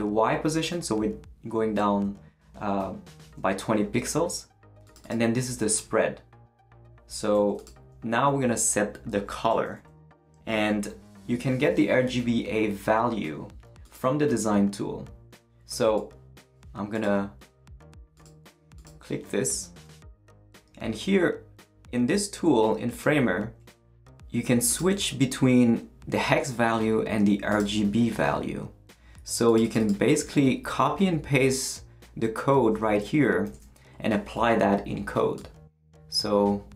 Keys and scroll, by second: 33.4 super+c.